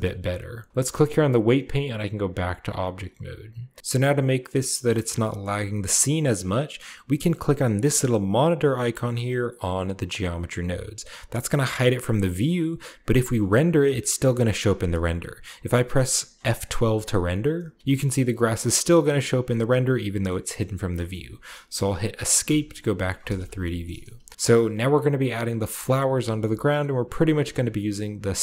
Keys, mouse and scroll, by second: 0.0-0.7 shift+scroll up 1, 1.3 click, 2.0 click, 3.8-4.4 scroll up 1, 3.8 KP_0, 4.4-5.0 scroll up 1, 5.0-6.4 shift+scroll up 1, 5.4-6.5 shift+middle drag, 11.7-13.2 drag, 13.8-17.4 shift+middle drag, 17.4 F12, 17.8-18.8 scroll down 1, 18.7-19.7 middle drag, 18.8-20.5 scroll up 1, 20.2-20.8 middle drag, 20.5-22.3 scroll down 1, 21.0-22.3 middle drag, 22.3 Escape, 23.8-24.3 shift+middle drag, 24.2 shift+scroll down 1, 24.3 ctrl+b.